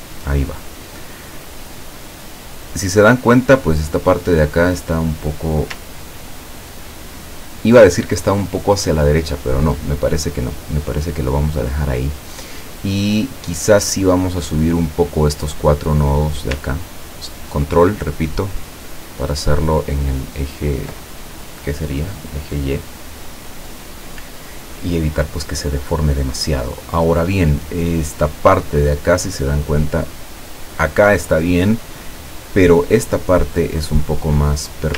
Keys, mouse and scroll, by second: 5.1 click, 14.5 click, 17.9-20.6 ctrl+drag, 34.1 click.